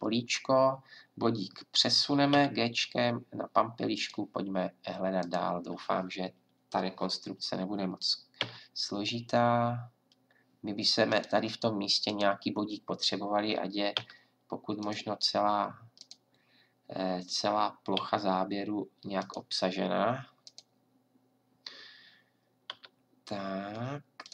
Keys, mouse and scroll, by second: 2.3 g, 5.2-7.3 drag, 8.4 g, 12.0 click, 13.9 g, 18.0 g, 22.7 g.